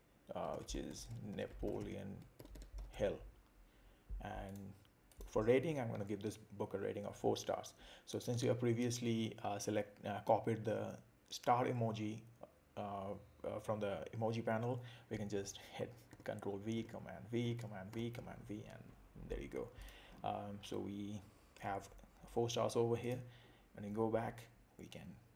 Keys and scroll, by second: 0.5 shift+n, 2.4 shift+h, 16.1 super+v.